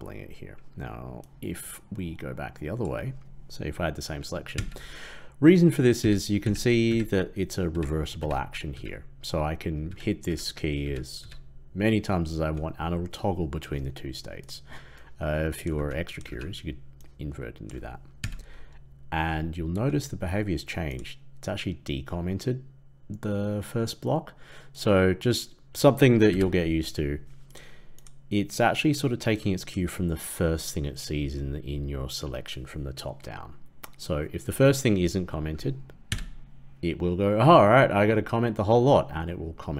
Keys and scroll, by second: 4.5 ctrl+/, 5.9 ctrl+/, 6.3 ctrl+/, 6.8 ctrl+/, 7.6 ctrl+/, 15.7 ctrl+x, 16.3 ctrl+v, 18.1 ctrl+/, 26.2 ctrl+., 27.5 ctrl+/, 36.0 ctrl+/.